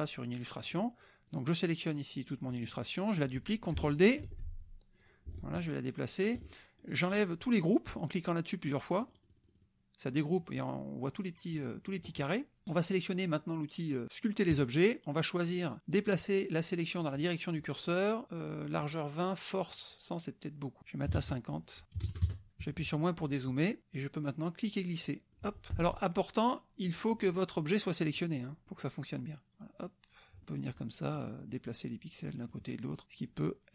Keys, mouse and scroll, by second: 0.6 click, 1.3-2.7 drag, 2.9 middle click, 4.2 ctrl+d, 5.0-6.4 ctrl+drag, 6.5 ctrl+middle click, 6.5 ctrl+click, 9.0 click, 14.5 click, 20.8 click, 21.1 KP_6, 22.0 KP_0, 22.2 KP_Enter, 22.6 KP_Subtract, 24.6 click, 25.8 ctrl+z, 26.9 click, 27.6 click, 28.6 click, 29.8-31.0 drag, 31.1 click, 32.0 click, 33.0 click, 33.6 click.